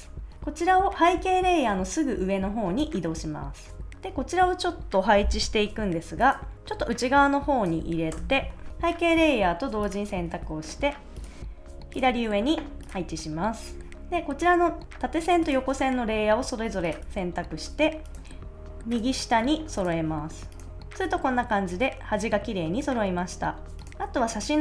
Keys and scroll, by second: 8.0 Return.